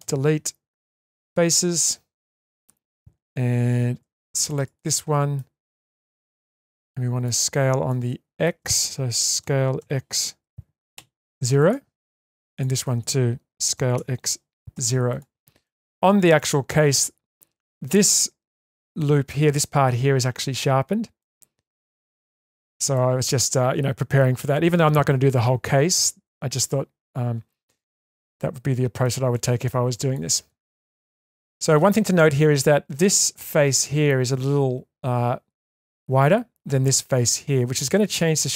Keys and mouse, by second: 0.0 Delete, 1.3-2.6 middle drag, 3.6 2, 4.7 middle click, 6.2-7.2 middle drag, 7.9 shift+middle click, 9.4 s, 12.5 alt+click, 13.7 s, 15.6 middle click, 17.7 middle click, 21.2 middle click, 21.9 shift+middle click, 23.0-24.2 middle drag, 28.0-29.0 middle drag, 29.3-29.7 middle drag, 29.9 shift+middle drag, 30.6 middle click.